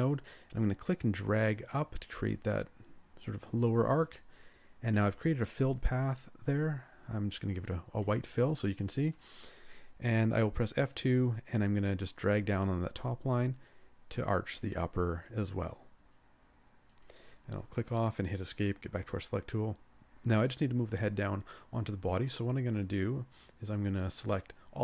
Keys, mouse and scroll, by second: 10.3 scroll up 1, 10.8 F2, 18.2 Escape, 19.2 scroll down 1.